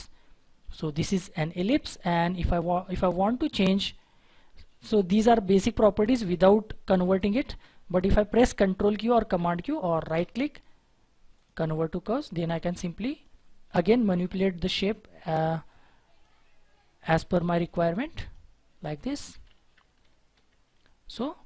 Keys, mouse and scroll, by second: 10.1 right click, 19.4 ctrl+z, 20.0 ctrl+z, 20.3 ctrl+z.